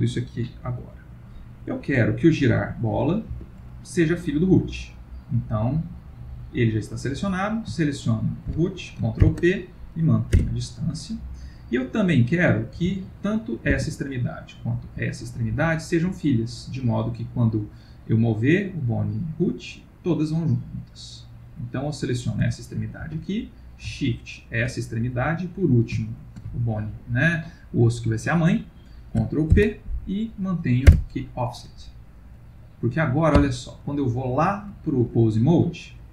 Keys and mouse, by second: 8.0 shift+click, 9.2 ctrl+p, 12.0 click, 12.7 g, 14.5 click, 14.9 g, 21.7 click, 22.4 g, 24.4 shift+click, 26.2 shift+click, 29.5 ctrl+p, 33.3 Tab.